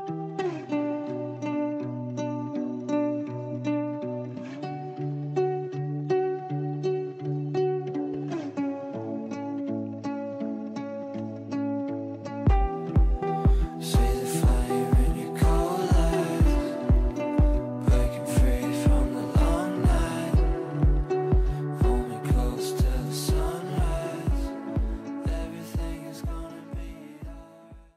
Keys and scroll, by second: 5.4 g, 10.0 g.